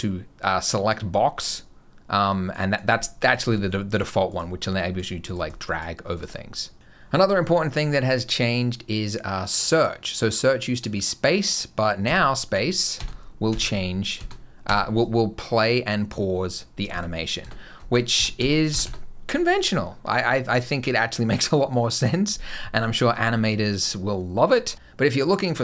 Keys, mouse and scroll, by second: 2.3 click, 3.1 click, 3.4 click, 4.1 click, 4.4 click, 5.1 click, 5.3 click, 6.0 click, 11.9-14.5 typing, 16.7-18.7 typing, 24.5 space.